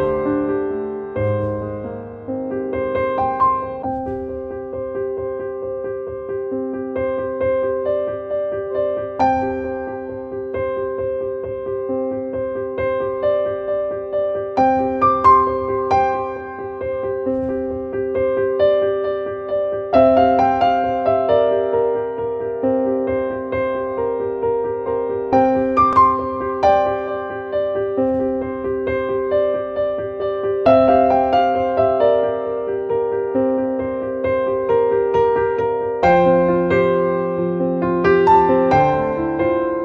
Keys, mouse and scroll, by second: 26.6 right click, 27.1 click, 28.2-31.3 drag, 32.2-33.7 drag.